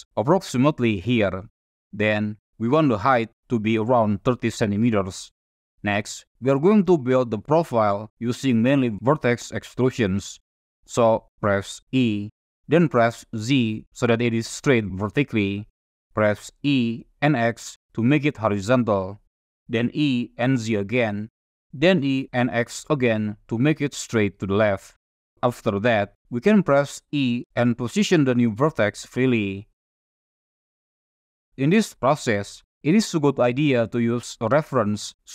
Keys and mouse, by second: 3.7-4.7 drag, 6.6 shift+middle click, 13.6 e, 13.6 z, 15.4 click, 17.1 e, 17.1 x, 18.0 click, 19.6 e, 20.0 z, 21.0 click, 22.0 e, 22.4 x, 23.7 click, 25.4 shift+click, 28.4 click, 28.4 e, 28.8 e, 29.7 click, 31.9 click, 31.9 e, 32.6 e, 34.2 click.